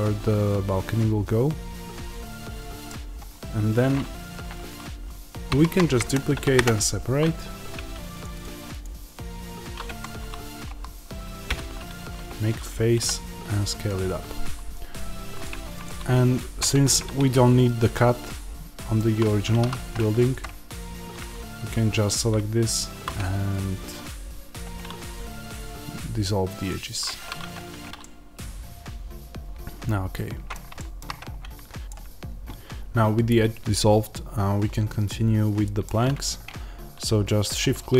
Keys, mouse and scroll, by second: 5.4 shift+d, 6.5 p, 6.5 Return, 7.7 Tab, 8.1 click, 9.8 Tab, 10.6 a, 15.4 Tab, 15.6 click, 16.5 Tab, 17.8-20.3 middle drag, 19.5 2, 20.3 alt+click, 26.6 x, 27.5 Tab, 27.9-37.4 middle drag, 31.0-31.8 scroll up 2, 31.8-33.3 scroll down 2, 33.3-35.0 scroll down 1, 37.4-37.9 shift+right drag.